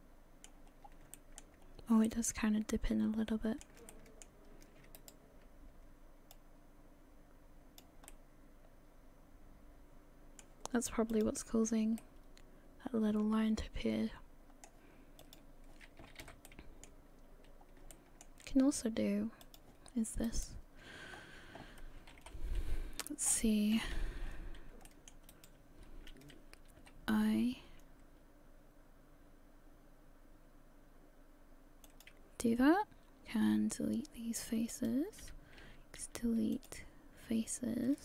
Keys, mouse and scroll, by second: 11.1 click, 12.0 middle click.